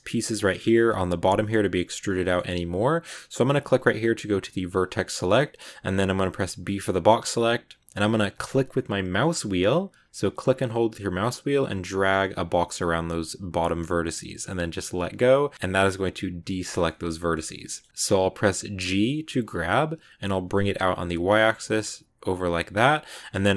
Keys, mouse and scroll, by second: 0.3-4.6 middle drag, 4.6 click, 5.2-6.6 shift+middle drag, 6.6 b, 16.5-17.9 shift+middle drag, 23.1 shift+middle click.